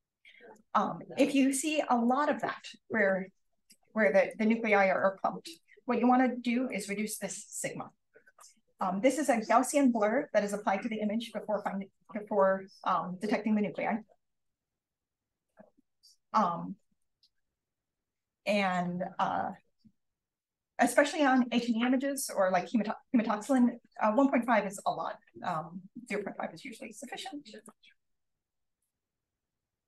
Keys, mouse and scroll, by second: 0.3 click, 0.9 click, 1.4 drag, 2.0-2.3 drag, 4.0 click, 4.6 click, 5.0-6.6 scroll up 2, 5.2 click, 6.6 click, 14.8 0, 15.7 5, 18.0-18.9 scroll down 1, 19.0 click, 19.6-20.5 scroll up 1, 20.4 click, 21.8 click, 22.6 click, 24.4 click, 25.9 click, 27.5 click, 28.6 click.